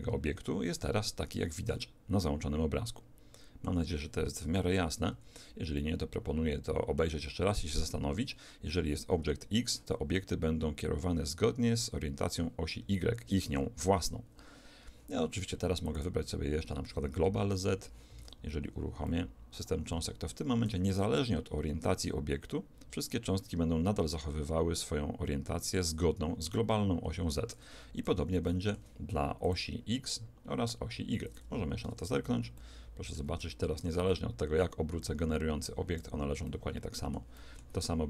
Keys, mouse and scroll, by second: 0.4 1, 1.7-3.6 middle drag, 4.5 shift+Left, 5.8-8.5 middle drag, 15.9 click, 18.2 alt+a, 19.1-22.2 middle drag, 20.7 r, 28.1 Escape, 28.5-31.1 middle drag, 29.5 click, 31.9 alt+a, 32.6-34.9 middle drag, 33.5 r, 36.5-38.0 middle drag.